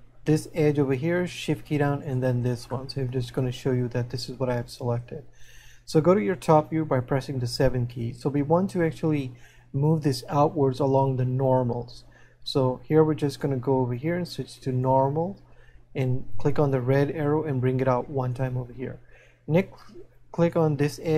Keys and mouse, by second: 2.9 shift+middle click, 17.7 click.